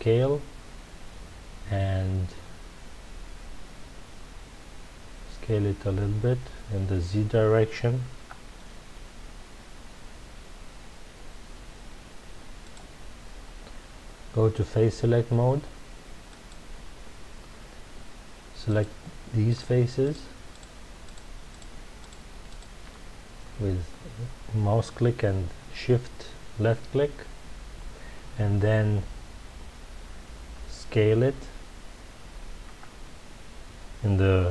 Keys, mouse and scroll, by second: 12.7 click, 16.3 click, 18.6 click, 19.4 shift+click, 20.0 shift+click, 20.5 shift+click, 21.0 shift+click, 21.5 shift+click, 22.0 shift+click, 22.4 shift+click, 32.6 s.